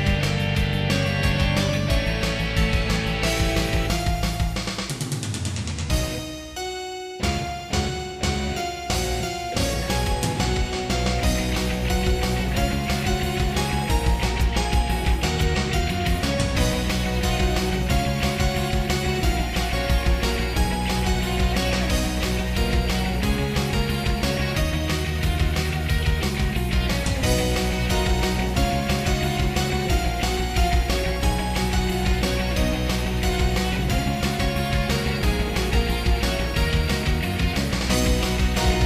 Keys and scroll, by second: 0.6 ctrl+z, 1.4 ctrl+z, 2.3 ctrl+z, 2.8 ctrl+z, 3.3 ctrl+z, 4.0 ctrl+z, 4.8 ctrl+z, 5.3 ctrl+z, 5.8 ctrl+z, 6.6 ctrl+z, 7.9 ctrl+z, 8.0 ctrl+z, 9.2 ctrl+z, 9.5 ctrl+z, 9.7 ctrl+z, 10.6 ctrl+z, 11.3 ctrl+z, 12.0 ctrl+z, 13.0 ctrl+z, 14.2 ctrl+s, 17.9 ctrl+z, 18.9 ctrl+z, 23.5 ctrl+z, 25.2 ctrl+z, 26.6 ctrl+z, 27.2 ctrl+z, 28.9 ctrl+z, 30.5 ctrl+z, 30.9 ctrl+z, 31.8 ctrl+z, 36.1 ctrl+z, 36.7 ctrl+z.